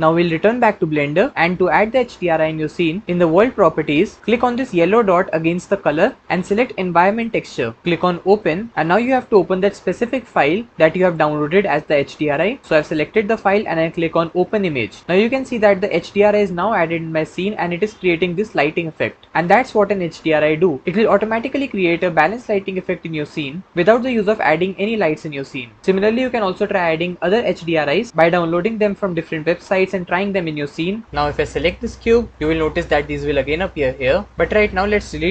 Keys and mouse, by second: 5.9-7.4 drag, 8.1 click, 15.4 middle click, 15.8-16.2 middle drag, 17.5 middle click, 17.7 middle click, 18.0-19.7 middle drag, 21.2 middle click, 21.9-22.3 middle drag, 22.4-23.7 middle drag, 24.6-25.8 middle drag, 25.8 KP_0, 31.4 click.